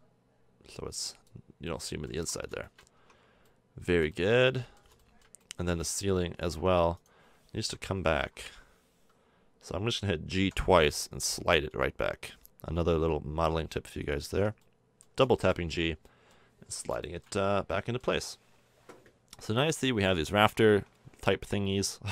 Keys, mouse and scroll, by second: 1.5 middle click, 2.1 a, 2.2 Tab, 2.6 middle click, 2.9 Tab, 4.3 middle click, 4.6-6.3 middle drag, 6.4 Tab, 7.9 KP_1, 10.0 middle click, 10.4 g, 14.2 a, 14.3 Tab, 14.8 middle click, 18.2-20.4 middle drag, 20.4 Tab, 20.7 Tab, 22.0-22.1 middle drag.